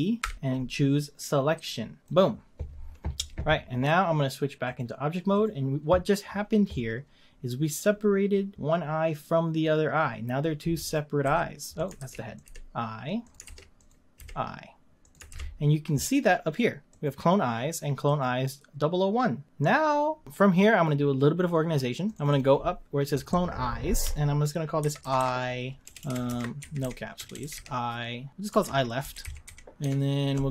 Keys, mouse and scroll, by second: 0.2 p, 4.6-7.8 drag, 10.8 click, 11.2 g, 12.0 ctrl+z, 12.3 click, 12.4 g, 13.4 ctrl+z, 13.8 click, 14.2 g, 15.3 ctrl+z, 16.9 click, 18.0 click, 22.1 click, 22.3-25.5 drag, 26.0 BackSpace, 27.3 BackSpace.